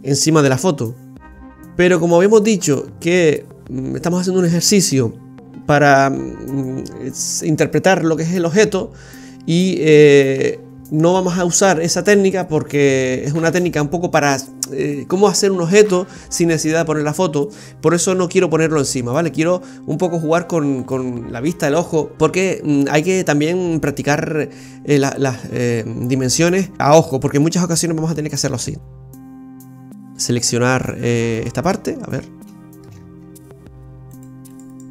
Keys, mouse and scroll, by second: 18.1 g, 29.6 scroll up 4, 30.0 right click, 30.8 alt+shift+right click, 31.0 alt+shift+right click, 31.6 alt+shift+right click, 32.1-32.4 scroll up 2, 32.5 shift+middle click, 33.0-33.7 scroll up 4, 34.2 right click, 34.5 alt+shift+right click, 34.8 right click.